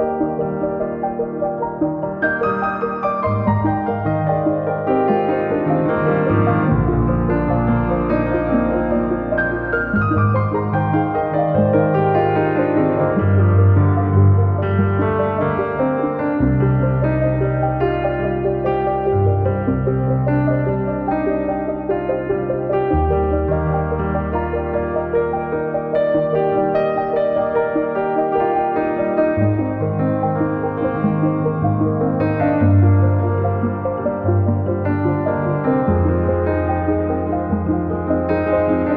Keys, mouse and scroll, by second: 0.7 ctrl+z, 0.9 ctrl+z, 3.4 ctrl+z, 4.8 KP_0, 7.1 scroll down 3, 7.2 scroll up 4, 8.2 click, 8.9 scroll up 1, 9.0 click, 9.2 scroll down 5, 9.4 middle click, 9.9 KP_1, 10.0 scroll up 9, 10.5 scroll down 3, 10.8 ctrl+z, 10.8 ctrl+z, 11.0 ctrl+z, 11.2-12.0 scroll up 3, 13.0 click, 13.5 scroll up 1, 13.8-15.4 drag, 15.7 scroll up 3, 15.7 click, 16.6 scroll up 1, 16.7-17.3 scroll down 4, 17.3-18.5 drag, 18.6-20.7 drag, 20.7 scroll down 2, 20.7-35.6 drag, 35.6 scroll down 2, 35.7 scroll up 4, 36.3-37.9 drag, 38.3 click.